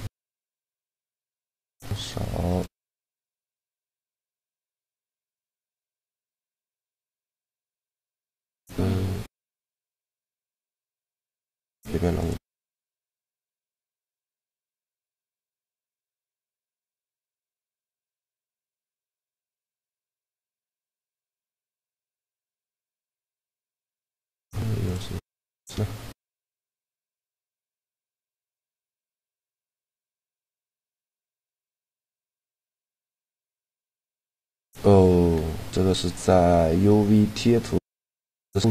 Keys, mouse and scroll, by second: 0.1-1.5 middle drag, 4.1 click, 4.9-6.7 drag, 6.3 u, 16.7-18.2 right drag, 17.1 shift+g, 19.5 u, 22.7 a, 23.2 s, 29.3 alt+z, 30.9-32.0 middle drag, 32.9 shift+g.